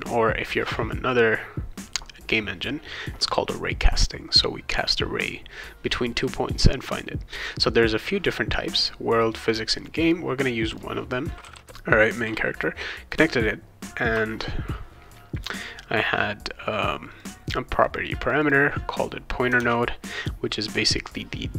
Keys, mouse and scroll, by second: 7.6 click, 8.8 click, 9.5 click, 9.8 click, 10.0 click, 11.2-12.0 typing, 15.3 click, 17.2 click, 18.2 click, 18.4 click, 19.6 alt+Tab.